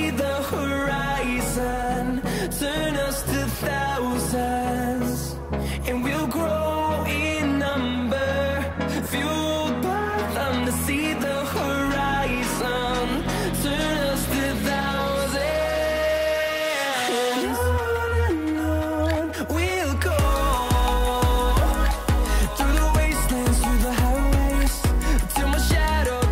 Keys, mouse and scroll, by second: 3.5 click, 7.5 Down, 14.9 click, 16.8-17.5 scroll down 1, 17.5-20.3 drag, 20.3 right click, 20.9 click, 22.6-24.6 scroll up 1.